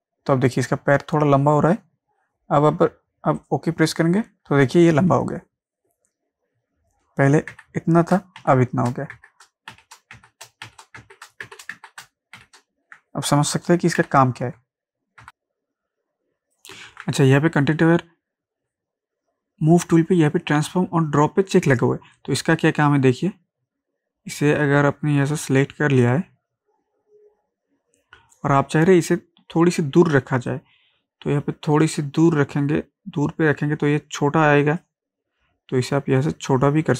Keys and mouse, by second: 7.5 ctrl+z, 8.4 z, 9.2 ctrl+z, 9.7 ctrl+shift+z, 10.7 ctrl+shift+z, 11.5 ctrl+shift+z, 12.4 ctrl+shift+z, 15.2 ctrl+z, 15.2-16.9 drag, 16.9 ctrl+z, 22.2-30.5 drag, 30.5-36.9 drag.